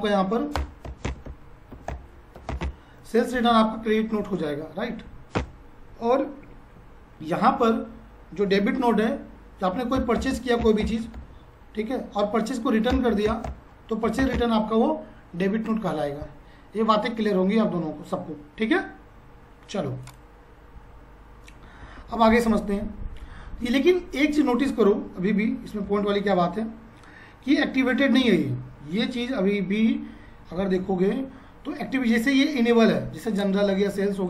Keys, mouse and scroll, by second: 0.5-1.6 typing, 4.7 typing, 4.7 F5, 5.3 Return, 7.2 F5, 9.7-10.7 typing, 10.9 F5, 12.2-13.7 typing, 16.3 typing, 16.4 F5, 20.1 click, 21.9 F5, 25.9 F5, 28.2 g, 29.8 Tab, 32.9 F5, 33.0 Tab, 33.3 click, 33.4 Tab.